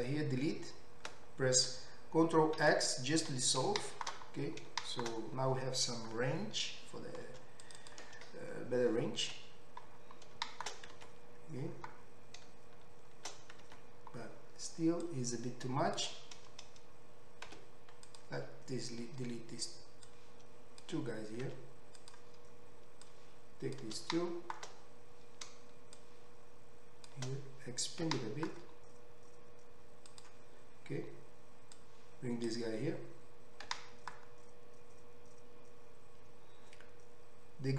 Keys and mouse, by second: 2.6 ctrl+x, 7.8 click, 11.6 Tab, 14.3 Tab, 14.4 middle click, 15.1-30.2 drag, 17.5 x, 21.4 x, 28.1 s, 30.2-31.9 middle drag, 31.9-37.7 drag, 33.7 g.